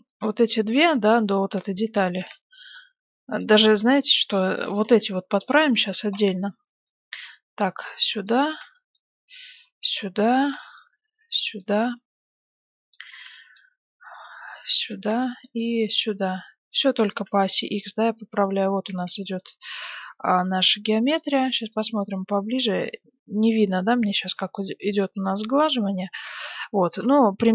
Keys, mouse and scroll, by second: 2.1 s, 4.4 a, 4.6 b, 5.5-8.4 drag, 6.5 b, 8.4 a, 8.5 b, 10.3 a, 10.4 b, 13.0 a, 13.2 b, 14.9 a, 15.0 b, 17.0 a, 17.2 b, 18.9 a, 19.0 b, 21.5 middle click, 22.6-24.0 middle drag, 24.0 a, 24.2 b, 25.6-26.6 drag, 26.6-27.5 middle drag, 27.4 a.